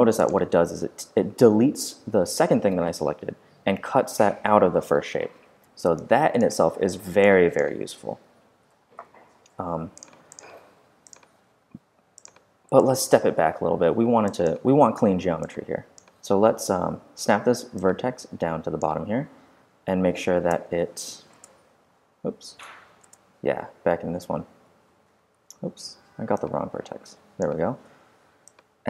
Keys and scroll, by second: 8.2 super+z, 11.5 w, 16.6-17.4 typing, 19.4 x, 20.4 space, 22.5 space, 24.9-25.9 typing, 27.8 v.